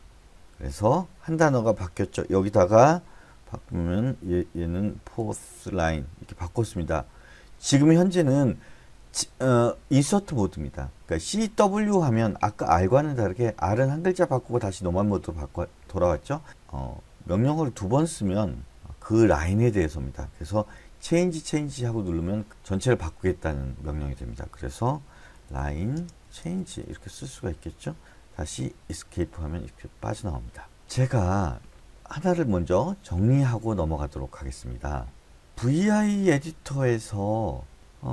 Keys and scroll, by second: 4.7-5.9 typing, 21.5 c, 21.9 c, 25.5-28.0 typing, 29.3 Escape.